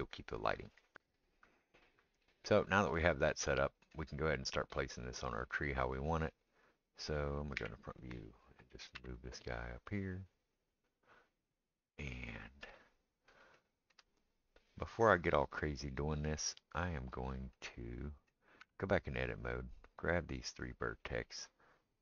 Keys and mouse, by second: 0.9-19.9 middle drag, 7.6 KP_1, 8.9 g, 18.6 Tab, 19.9-22.0 drag.